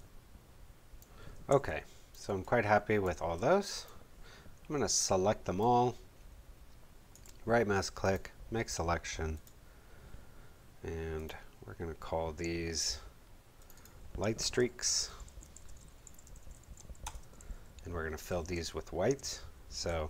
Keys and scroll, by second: 1.4 space, 14.8-17.2 typing, 19.3 super+d.